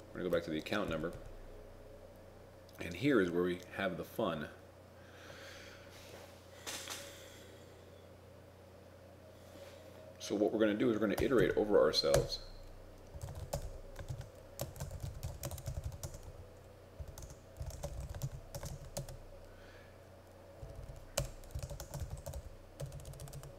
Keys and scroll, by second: 14.1 shift+Home, 14.1 shift+9, 14.8 shift+a, 15.5 shift+d, 18.3 shift+0.